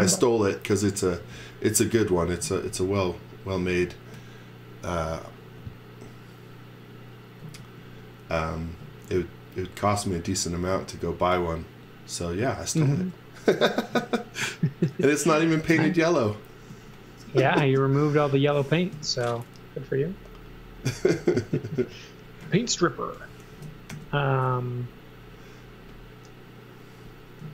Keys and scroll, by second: 2.5 x, 7.6 z, 16.7 z, 18.9 l, 22.4 z, 23.0 x, 23.5 space, 23.9 l.